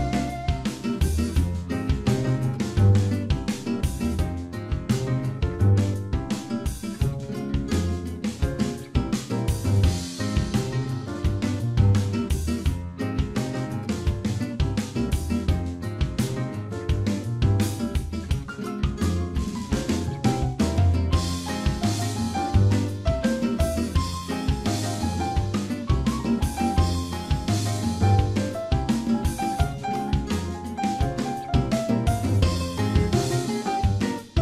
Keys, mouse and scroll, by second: 1.8 right click, 4.5 click, 5.7 click, 8.3 click, 12.0 click, 13.5 click, 16.8 click, 21.2 click, 22.8 shift+click, 29.4 shift+middle click, 30.3 click, 31.0 middle click, 33.4 click, 33.9 scroll down 2.